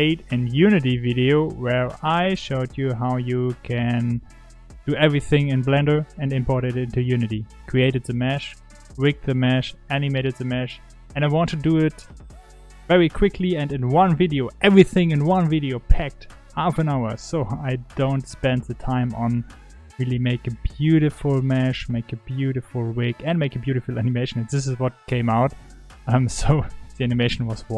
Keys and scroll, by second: 2.0 g, 6.9 g, 9.9 3, 10.4 1, 16.7 g, 17.6 r, 19.1 g, 20.2 r, 21.9 g.